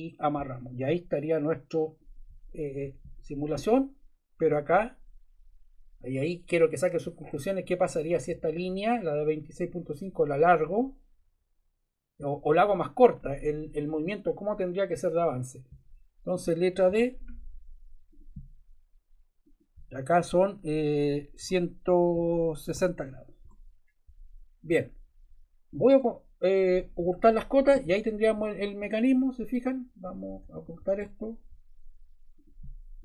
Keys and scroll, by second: 2.8 Escape, 16.8 d, 21.3 1, 22.1 6, 22.7 0, 23.4 Return, 30.4 Escape.